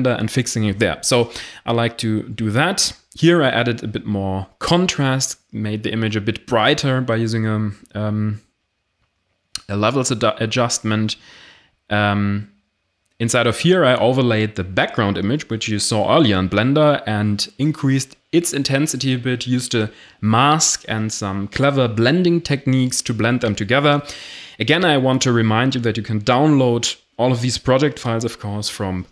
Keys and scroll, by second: 22.8 2.